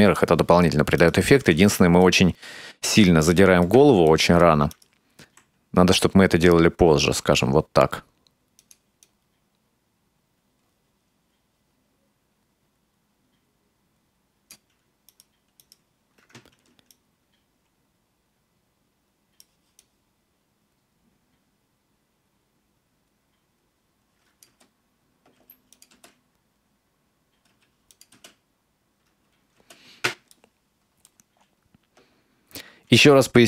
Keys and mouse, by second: 1.0 right click, 2.1-3.8 ctrl+middle drag, 4.2 shift+middle click, 4.7 right click, 5.3 r, 9.1-14.5 drag, 15.1 right click, 15.6 right click, 17.0-19.5 right drag, 19.8-24.5 drag, 24.5 space, 25.4 space, 25.8 click, 26.0 space, 27.6 space, 27.9 click, 28.2 space, 29.6 space, 30.4 middle click.